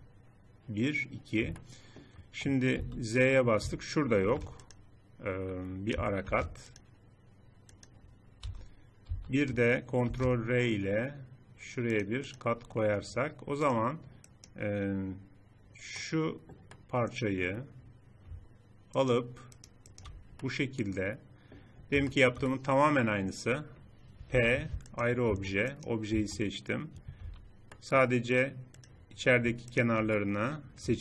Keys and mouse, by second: 1.4 middle click, 2.6 z, 4.0 ctrl+r, 6.1 ctrl+r, 8.2 z, 8.9 z, 9.8 ctrl+r, 15.4-16.5 middle drag, 18.8-20.2 drag, 20.2 middle click, 20.5 middle click, 21.6-23.2 drag, 24.1-25.2 drag, 24.1 p, 25.2 Tab, 25.9 Tab, 27.0 a, 29.5 middle click, 30.4 middle click.